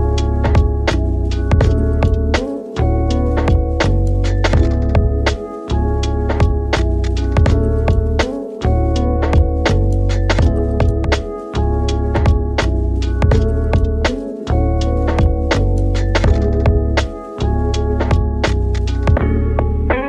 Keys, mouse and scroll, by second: 0.6 click, 2.4 shift+click, 3.3 click, 6.3-7.6 drag, 8.5 click, 8.9 z, 11.0 Tab, 11.2 drag, 11.8 Tab, 13.0 KP_1, 14.5 click, 15.8 click, 16.7 click.